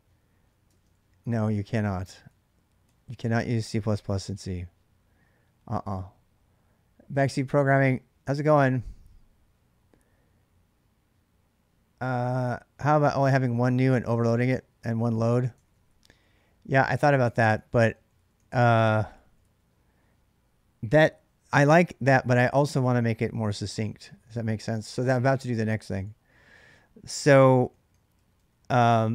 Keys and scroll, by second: 0.0-2.7 typing, 0.5 ctrl+[, 3.0 Return, 15.3-19.5 typing, 24.4 ctrl+[, 24.6-28.0 typing.